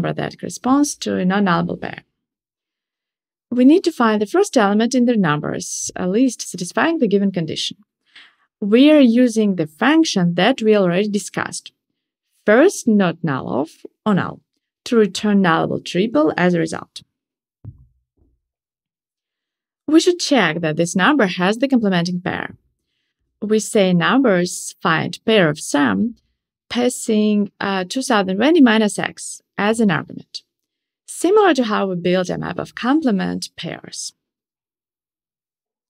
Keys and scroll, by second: 10.2 Return.